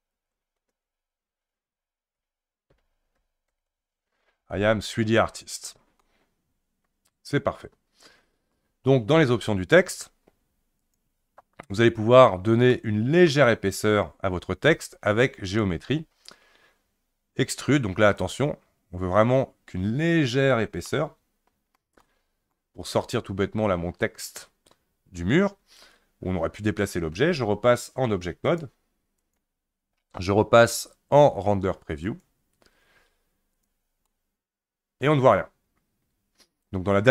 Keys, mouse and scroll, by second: 0.0-3.5 typing, 6.0-9.0 middle drag, 10.8 click, 12.7 middle click, 13.5-15.5 scroll up 1, 15.5-20.9 drag, 20.9-24.2 middle drag, 24.2-25.7 scroll down 2, 28.5-31.6 drag, 32.1 click, 33.5 click, 34.1-37.1 middle drag.